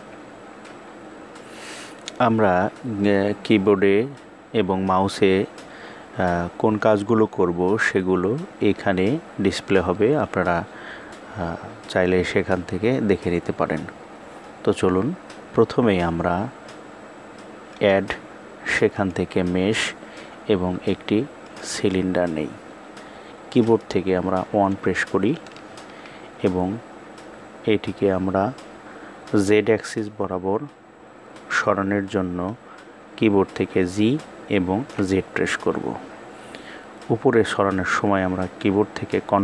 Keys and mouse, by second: 17.2-21.1 drag, 23.9 KP_1.